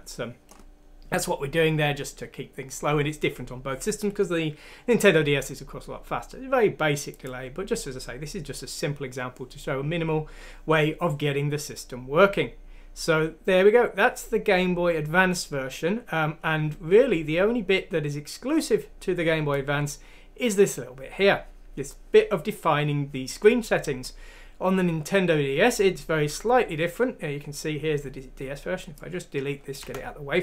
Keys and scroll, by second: 29.8 Delete.